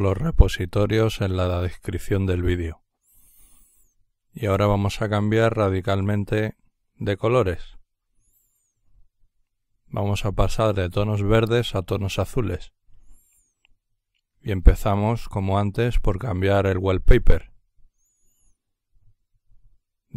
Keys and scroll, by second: 0.0-1.3 typing.